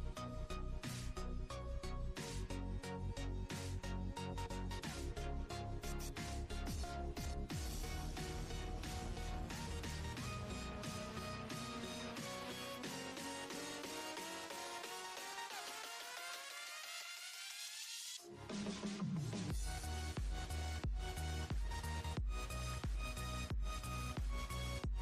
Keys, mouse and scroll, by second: 1.3 click, 2.5 click, 4.0 click, 5.1 shift+click, 5.8 shift+click, 6.9 click, 8.8 shift+click, 9.8 KP_1, 10.4 scroll up 1, 11.3-12.6 drag, 12.6 scroll up 7, 13.9-15.0 drag, 15.0 ctrl+b, 20.6 click, 21.3-21.8 scroll, 24.5 click.